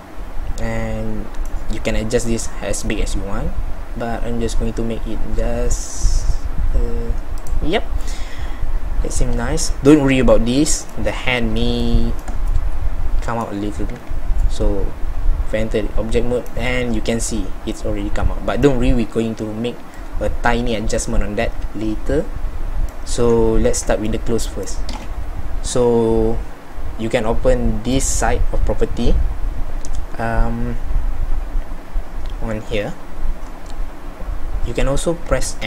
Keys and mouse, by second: 1.8 s, 14.0 z, 18.5 middle click, 19.3 middle click, 19.5-21.5 middle drag, 23.2 z, 23.7 z, 35.6 n.